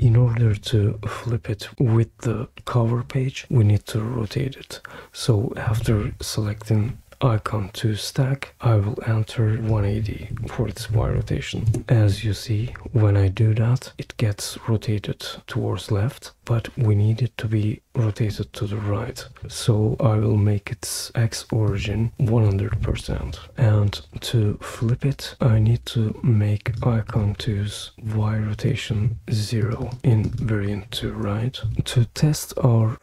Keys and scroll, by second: 10.0-11.4 typing, 11.6 Return, 22.7-24.1 typing, 31.6 typing.